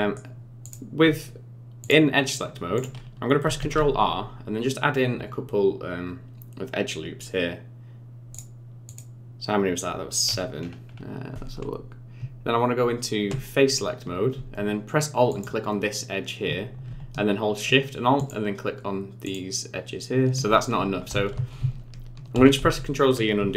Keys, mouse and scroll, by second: 0.6 click, 1.8 click, 2.7 click, 3.6 ctrl+r, 10.2-12.2 scroll up 11, 12.2 Tab, 15.3 alt+click, 18.2 alt+shift+click, 19.2 alt+shift+click, 21.1 ctrl+z, 21.3 ctrl+z, 21.6 ctrl+z, 22.4 ctrl+z, 22.6 ctrl+z.